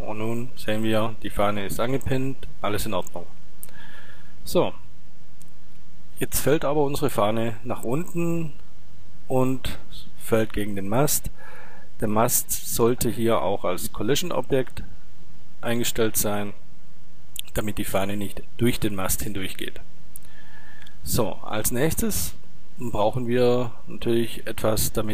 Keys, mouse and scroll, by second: 3.5-6.5 drag, 12.1-14.0 drag, 14.0 middle click, 14.2-16.0 drag, 16.0 middle click, 16.4-18.2 drag, 19.5-20.1 middle drag, 20.2 middle click, 21.0 click, 22.8 middle click.